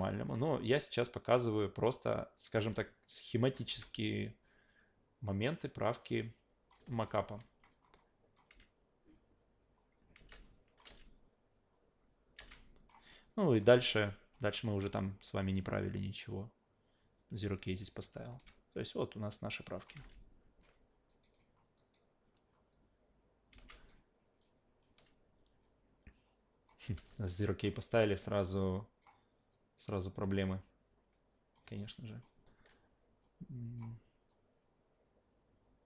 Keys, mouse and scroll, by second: 0.8 click, 2.0 click, 2.8-3.5 alt+drag, 3.7 s, 4.4-6.7 drag, 7.0 alt+right click, 7.2 alt+drag, 7.7 alt+middle click, 7.9-8.3 alt+drag, 8.5 alt+v, 10.3 alt+v, 10.4-10.8 drag, 10.8 alt+v, 12.4 v, 12.6 click, 13.2-13.6 drag, 14.3-14.8 drag, 15.6 click, 18.3 a, 19.8 click, 20.0 alt+v, 21.1 alt+right drag, 21.4 alt+middle drag, 21.8 alt+right click, 22.3 alt+middle click, 23.5 alt+v, 23.7 alt+right click, 25.6 click, 26.8 e, 27.1-27.6 alt+drag, 28.2-29.0 drag, 29.5-31.5 drag, 31.7-32.2 alt+drag, 33.2 click, 34.3-35.8 drag.